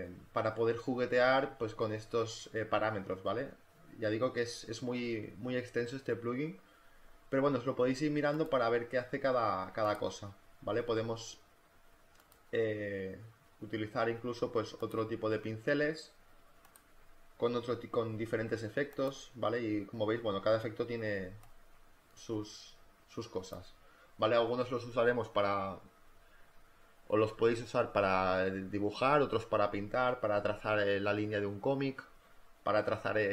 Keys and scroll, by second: 10.8 space, 15.1 space, 21.1 space.